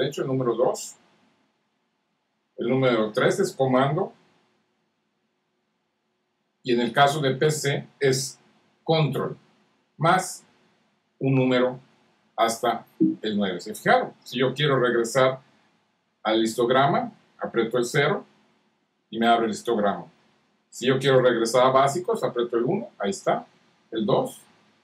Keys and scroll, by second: 2.3 super+3, 4.2 super+4, 6.4 super+5, 9.1 super+6, 10.7 super+7, 11.8 super+8, 12.9 super+9, 18.3 super+0, 22.4 super+1, 23.6 super+2, 24.5 super+3.